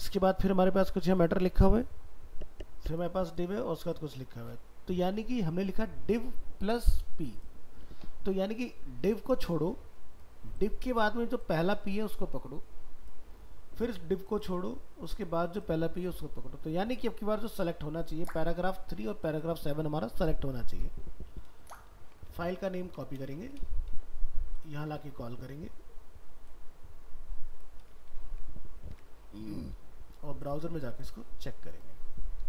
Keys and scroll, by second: 22.0 ctrl+s, 22.5 alt+f, 22.6 alt+秄, 23.2 ctrl+c, 28.9 alt+Tab.